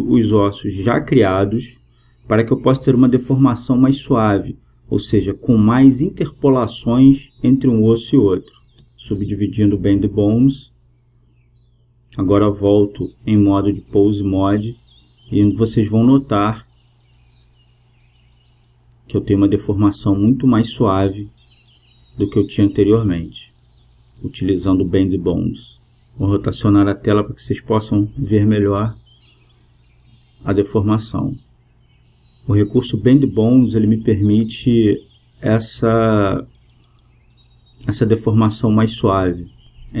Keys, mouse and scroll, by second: 1.1-6.1 drag, 5.3-7.2 right drag, 6.4-8.7 drag, 8.6-10.6 right drag, 10.0-12.3 drag, 14.2-16.0 drag, 16.4-18.3 right drag, 18.7 g, 28.1 middle click, 33.4 middle click, 34.3 g, 39.0-40.0 middle drag.